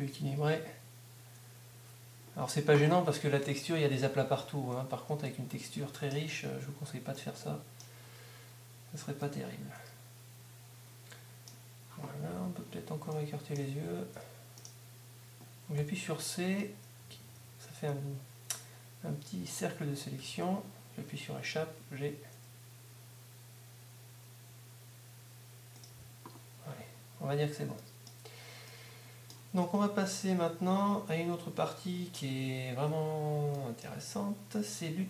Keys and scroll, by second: 15.9 c, 20.2 ⟲, 21.6 g, 21.9 g, 29.5 Tab.